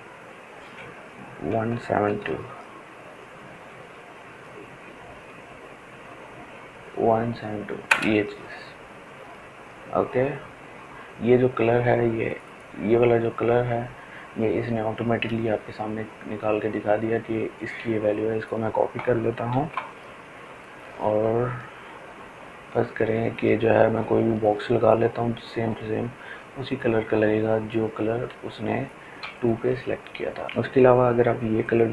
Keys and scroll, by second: 5.7 Return, 17.2 ctrl+c.